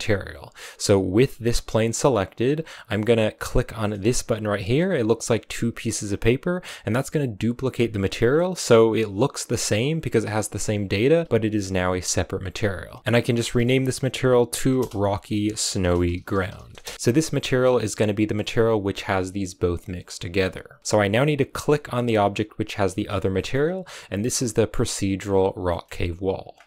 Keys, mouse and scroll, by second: 0.3-2.5 right drag, 2.5-6.0 scroll down 5, 6.0-7.6 drag, 7.6-8.2 scroll up 1, 8.2-9.3 scroll up 2, 10.9 a, 11.2 a, 16.9 right click, 17.5-18.7 middle drag, 18.7-22.1 right drag, 23.2 middle click, 23.5-24.4 scroll up 2, 24.4-25.7 middle drag, 25.7-26.5 scroll up 1, 26.6 middle click.